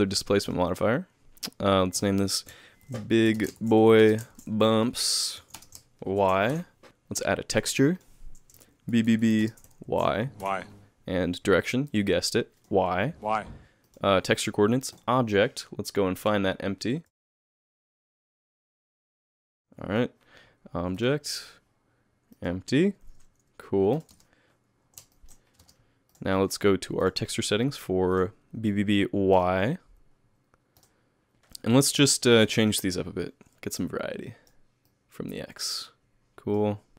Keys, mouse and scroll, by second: 16.3 click, 17.3 shift+middle click, 18.5 a, 18.8 KP_3, 19.6 alt+a, 21.0 click, 23.9 click, 24.1 space, 25.1 shift+middle click, 25.6 space, 26.1 click, 27.0 click, 28.1 click, 31.3 click, 31.3 KP_1, 31.3 KP_3, 31.8 middle click, 32.4 middle click, 33.8 click, 34.9 click.